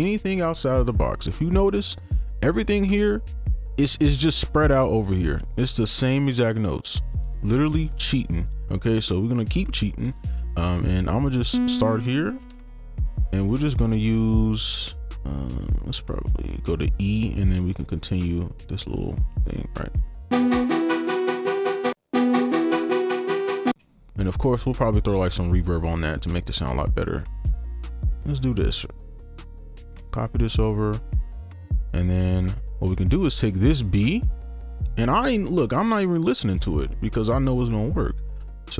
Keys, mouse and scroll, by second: 2.2 ctrl+click, 4.8 ctrl+click, 6.8 ctrl+click, 7.4 right click, 11.8 ctrl+click, 12.5 d, 13.6 ctrl+click, 15.9 shift+2, 16.2 shift+click, 17.4 ctrl+click, 17.6 shift+click, 19.2 shift+click, 20.3 space, 21.9 space, 22.3 ctrl+click, 23.4 shift+click, 23.7 shift+space, 24.1 right click, 26.8 right click, 27.3 ctrl+click, 28.2 shift+2, 28.3 shift+click, 29.7 ctrl+a, 30.3 shift+click, 33.0 shift+right click, 33.2 ctrl+click, 33.7 shift+click, 35.8 right click, 36.3 ctrl+click, 36.8 shift+click, 37.7 ctrl+Up.